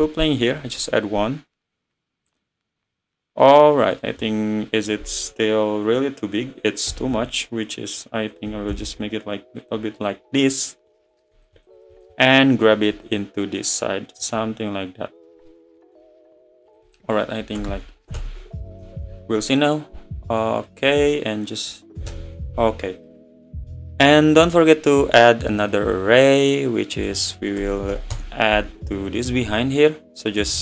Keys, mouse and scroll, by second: 3.9-6.0 drag, 6.9 s, 8.5 s, 11.0-15.5 drag, 15.5-16.7 middle drag, 16.7-19.1 drag, 19.1 `, 20.7-23.5 drag, 23.5-24.6 middle drag, 25.7 click, 26.1 scroll down 3, 26.9 click, 27.7 BackSpace, 30.4 click.